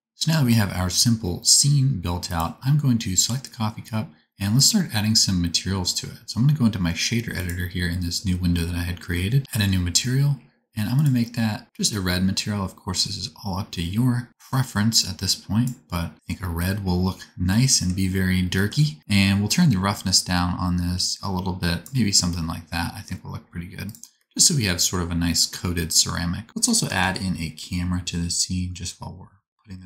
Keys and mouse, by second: 0.0-19.0 drag, 2.2 middle click, 2.2 right click, 4.6-11.0 middle drag, 4.6-11.0 right drag, 23.8-26.5 drag, 26.5-29.8 shift+middle drag, 26.9 shift+a.